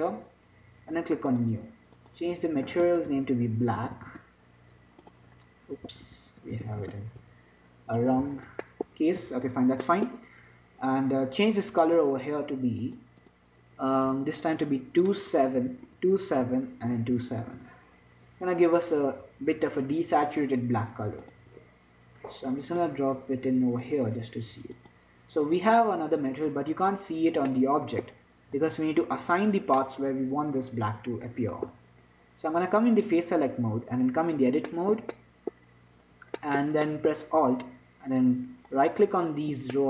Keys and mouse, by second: 9.0-12.3 middle drag, 9.5 z, 12.3-26.8 drag, 26.8 z, 27.3 middle click, 28.9 middle click, 29.2 Tab, 33.3-35.5 drag, 35.5-38.9 middle drag, 38.9-39.8 right drag.